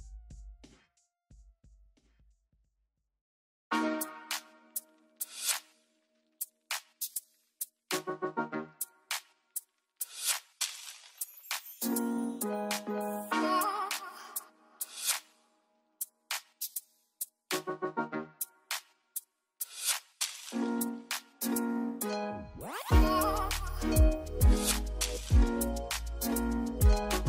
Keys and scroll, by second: 2.0-3.8 typing, 13.1 j, 18.8-20.8 typing.